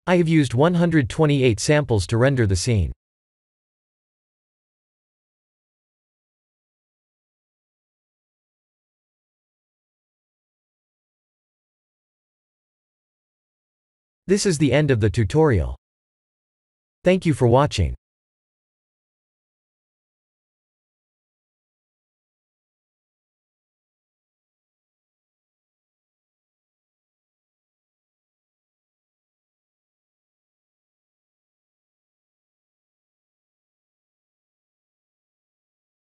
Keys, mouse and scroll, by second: 2.6 ctrl+space, 3.6 n, 4.4 shift+middle click.